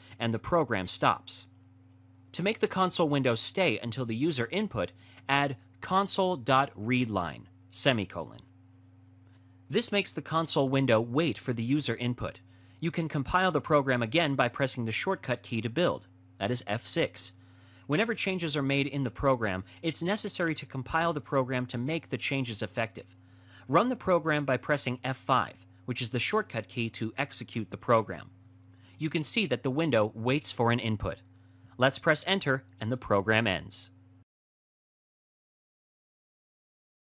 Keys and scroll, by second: 15.1 F6, 22.9 F5.